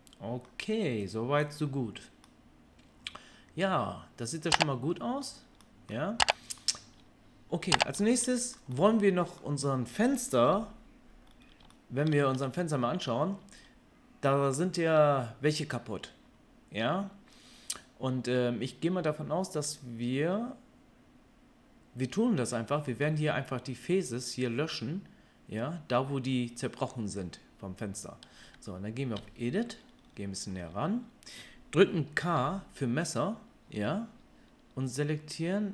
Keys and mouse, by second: 10.4 KP_3, 29.1 Tab, 32.3 k, 35.4-35.7 drag.